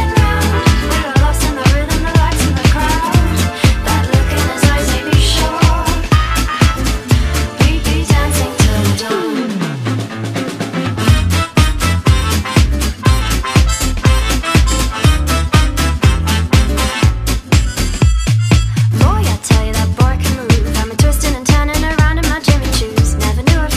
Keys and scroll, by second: 7.8 space, 8.3 space, 11.1 space, 12.9 space, 13.2 space, 15.9-19.8 typing, 21.9-23.7 typing.